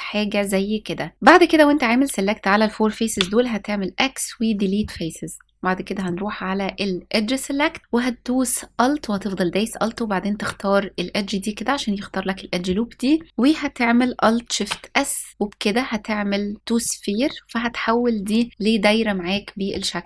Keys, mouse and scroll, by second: 0.0 click, 1.1 right click, 2.7 x, 5.6 click, 9.4 alt+click, 11.6-13.6 scroll up 1, 14.1 alt+shift+s, 17.9 click, 18.9 middle click, 19.6 middle click.